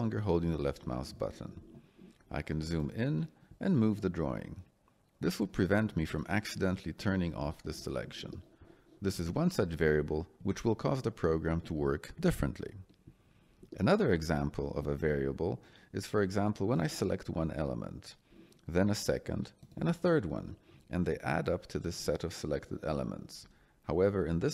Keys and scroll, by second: 5.3 Escape, 10.3 Escape, 24.2 Escape.